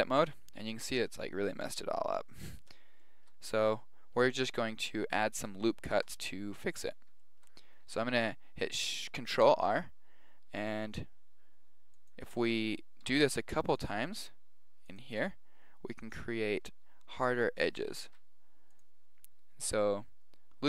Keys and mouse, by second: 2.3-9.1 middle drag, 7.8 ctrl+r, 13.0 ctrl+r, 18.0 ctrl+r.